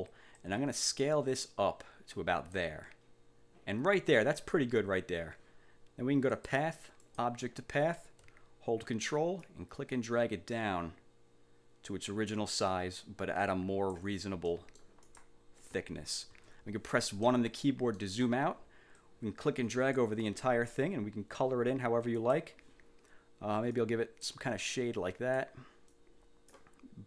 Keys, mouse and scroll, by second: 0.5-2.8 ctrl+drag, 6.4 click, 7.2 click, 9.5-14.2 ctrl+drag, 14.6 ctrl+click, 16.4 1, 17.4 click, 19.1-20.3 drag, 22.3 click, 23.8 click, 24.7 click, 26.0 click.